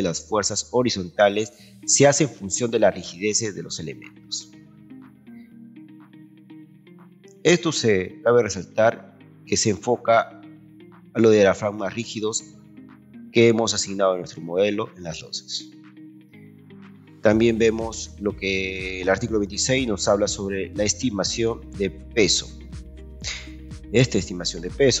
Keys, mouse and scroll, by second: 17.8 scroll down 2.